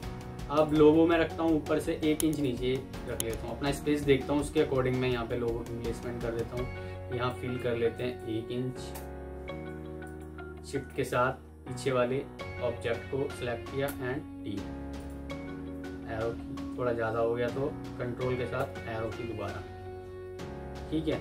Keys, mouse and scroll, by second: 0.9 Escape, 8.6 typing, 8.8 Return, 10.7 shift+click, 13.7 typing, 14.5 Escape, 15.5 Down, 18.5 ctrl+Up, 19.5 F4, 20.0 Escape, 20.6 F2.